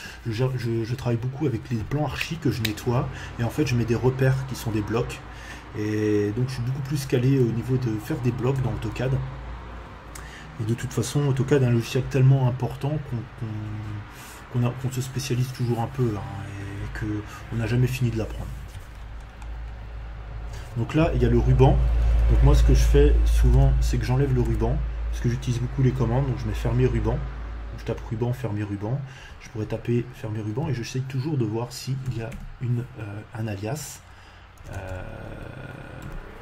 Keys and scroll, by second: 21.7 r, 21.8 u, 22.0 b, 22.2 n, 23.3 BackSpace, 24.2 a, 24.4 n, 29.9 Escape, 32.0 f, 32.3 r, 34.5 BackSpace, 35.1 e, 35.2 r, 36.0 u.